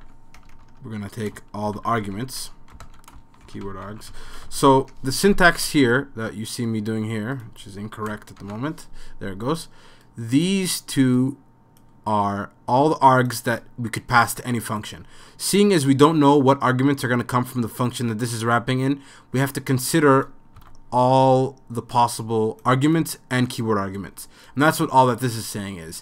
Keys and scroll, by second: 0.0-6.3 typing, 8.4 typing, 20.6 5.